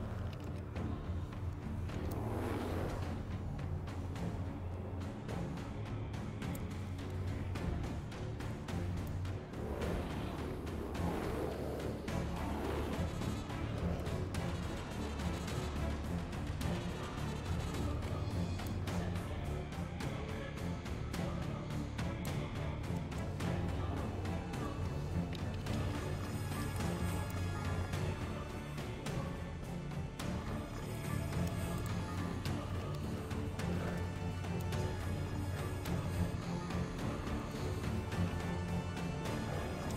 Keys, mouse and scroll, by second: 2.1-6.5 alt+drag, 8.3 click, 9.1-14.0 alt+drag, 15.2 click, 16.2 scroll up 2, 17.2 click, 18.3 alt+scroll down 2, 18.6-22.2 alt+drag, 22.6 alt+scroll down 2, 22.9 alt+middle click, 24.5 click, 27.3-30.9 alt+drag, 31.7 click, 34.6-35.8 alt+drag, 37.4 click.